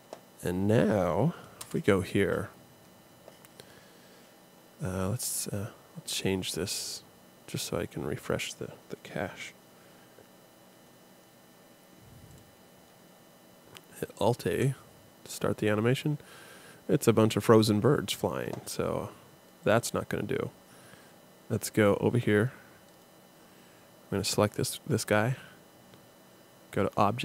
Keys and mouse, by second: 0.4-1.6 drag, 1.6 KP_0, 12.3-14.3 drag, 14.5 alt+a, 19.7 click, 21.6 click.